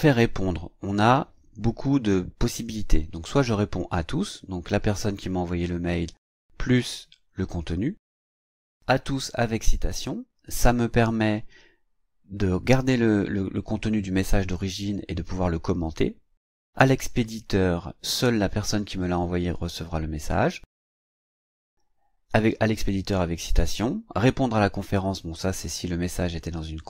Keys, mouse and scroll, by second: 0.9 click.